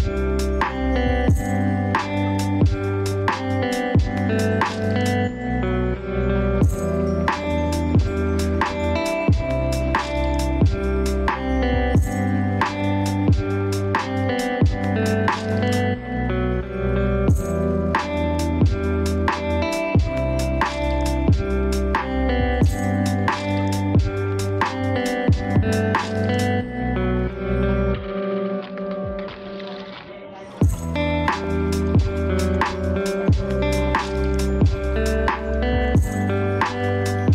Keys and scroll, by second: 11.3 ctrl+space, 28.2 ctrl+space, 30.1 ctrl+c, 31.6 ctrl+v, 37.1 ctrl+space.